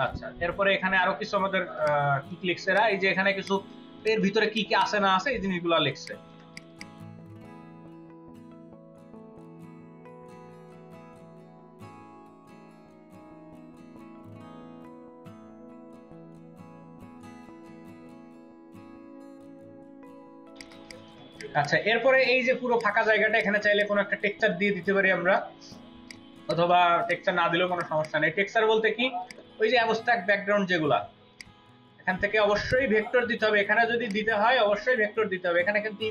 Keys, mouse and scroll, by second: 1.6-2.4 space, 2.4-3.4 ctrl+drag, 2.6 middle click, 4.6 ctrl+alt+click, 5.2 space, 6.6 double click, 7.0 ctrl+a, 7.2-7.6 typing, 9.2 ctrl+space, 11.4-12.3 typing, 13.0 double click, 13.6-15.7 typing, 15.6 ctrl+click, 16.4 double click, 17.0 double click, 18.1 ctrl+alt+click, 18.2 space, 19.8 double click, 20.7 ctrl+alt+click, 21.1 space, 21.4 space, 21.5 double click, 22.5 space, 23.0 space, 23.4 ctrl+alt+click, 26.7 space, 27.4 space, 27.7 ctrl+alt+click, 28.2 space.